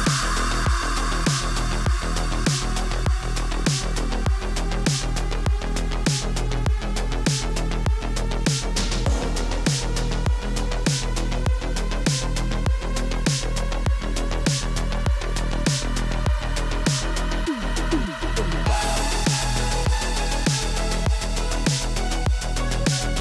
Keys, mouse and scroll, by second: 1.2 Return, 3.1 click, 4.2 click, 4.5 click, 5.0 click, 5.4-6.1 typing, 5.9 click, 6.9 click, 8.5 click, 8.9 click, 10.5 click, 11.0 click, 11.4 click, 12.3 click, 12.9-14.3 typing, 15.5 click, 16.0 click, 16.0 typing, 17.2 click, 18.5-20.9 typing, 22.5 click, 22.7 ctrl+c, 23.0 click.